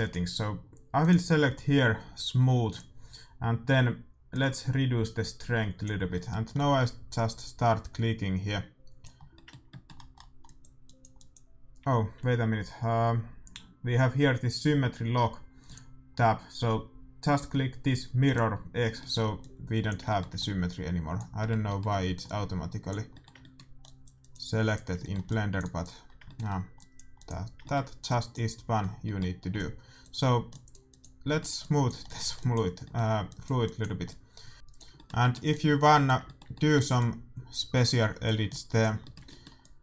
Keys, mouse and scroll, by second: 4.2-6.1 drag, 6.1 middle click, 6.5-8.3 drag, 9.1-12.4 middle drag, 10.4-12.9 drag, 12.7-15.6 middle drag, 15.6-17.5 drag, 16.1-18.2 middle drag, 18.2-36.7 drag, 18.9-31.2 middle drag.